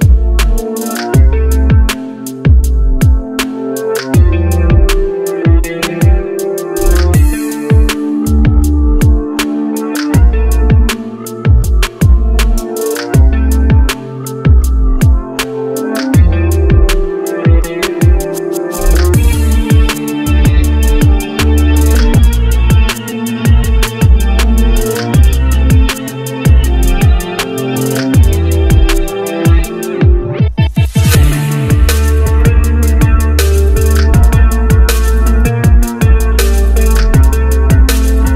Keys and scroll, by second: 3.7 shift+space, 10.1 ctrl+c, 11.9 ctrl+v, 12.6 z.